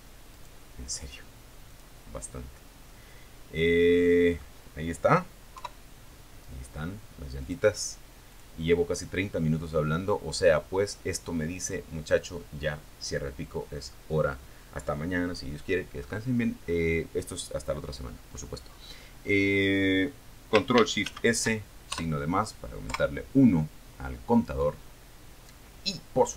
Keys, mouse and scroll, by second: 0.7 scroll down 1, 1.0-2.4 middle drag, 2.4 click, 3.8 KP_3, 5.6 click, 6.5 click, 8.1 scroll down 2, 8.7 scroll up 2, 9.6 scroll up 2, 14.8 scroll down 2, 16.4 scroll down 1, 16.9 scroll up 1, 17.4 scroll down 1, 19.2 ctrl+shift+s, 21.0 KP_Enter.